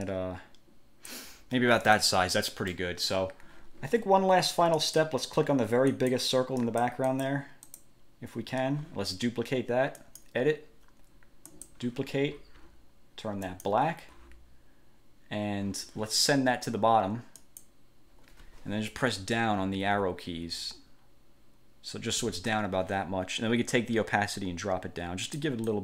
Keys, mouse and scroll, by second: 2.0 click, 2.9 middle click, 4.9 click, 6.1 click, 6.8 click, 7.9 click, 10.2 click, 11.7 click, 13.7 click, 17.6 click, 19.4 Down, 24.5-25.7 drag.